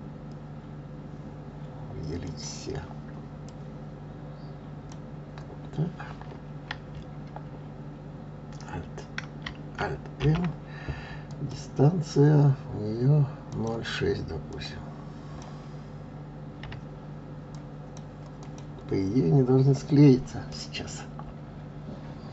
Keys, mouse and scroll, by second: 2.2 click, 3.4 click, 13.5-16.5 drag, 18.4 click, 19.5-20.3 scroll up 1, 20.5-22.3 middle drag.